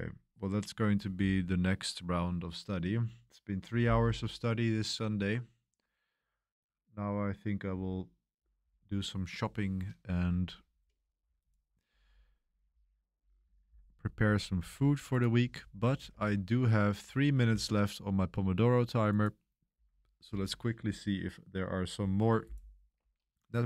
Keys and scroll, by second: 14.7 Escape, 16.1 super+3, 17.1 super+1, 17.4 super+3.